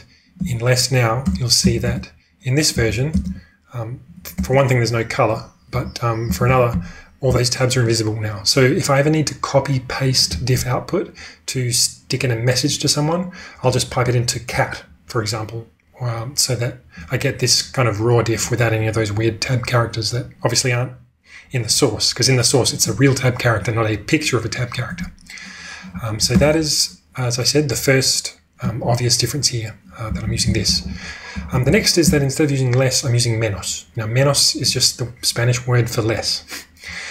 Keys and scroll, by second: 0.4 Return, 1.3-4.5 typing, 5.7-6.5 typing, 8.6 typing, 26.4 ctrl+space, 26.5 ctrl+space, 30.0-32.0 typing.